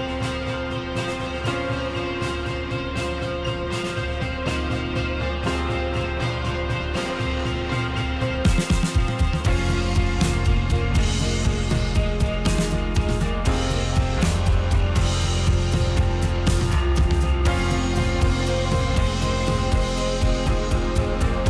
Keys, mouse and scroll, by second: 0.4 click, 0.7-2.5 middle drag, 2.9 middle click, 3.5 `, 4.8 a, 5.4 r, 8.5 g, 9.8 g, 11.1 click, 11.2-13.5 middle drag, 13.6 middle click, 14.4 click, 15.2 shift+click, 15.6 middle click, 17.0 r, 18.7 click, 18.9 middle click, 19.5 click, 20.0-21.2 middle drag.